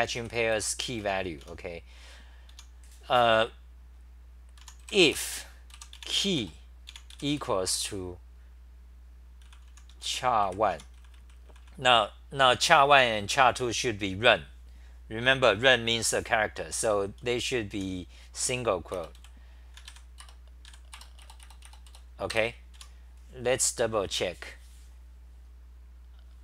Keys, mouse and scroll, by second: 0.0-1.9 typing, 4.4-5.1 typing, 10.7 Home, 11.0 c, 11.1 c, 11.3 c, 11.5 c, 12.9 h, 17.5-19.2 typing, 20.2 Return, 22.3 Return, 22.3 ctrl+g.